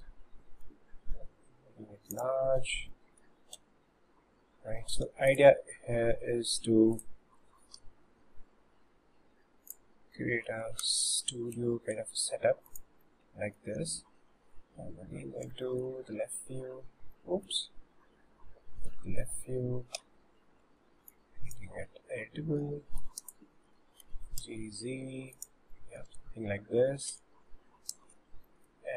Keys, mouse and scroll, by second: 0.7 s, 2.4-2.7 scroll down 5, 2.9 middle click, 3.6 Tab, 5.1 3, 5.3 click, 6.3 middle click, 7.0 click, 7.9 Delete, 10.2 middle click, 10.9 s, 11.6 Tab, 12.0 s, 13.1-13.8 middle drag, 15.3 scroll down 1, 15.7-16.2 shift+middle drag, 17.1-17.8 middle drag, 17.8 scroll down 1, 20.1 1, 20.6 Tab, 21.1 click, 22.6 1, 23.0 click, 24.1 g, 25.7 middle click, 26.2 Tab, 26.6 scroll up 2, 27.2 Tab, 28.1 alt+z, 28.5 middle click.